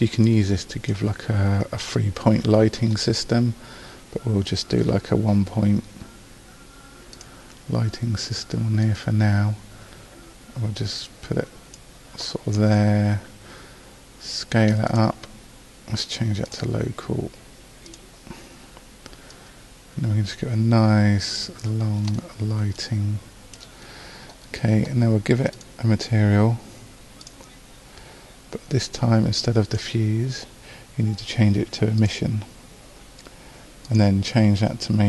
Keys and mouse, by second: 0.1-6.3 drag, 7.2-8.8 drag, 16.0-21.4 drag, 22.4-24.0 middle drag.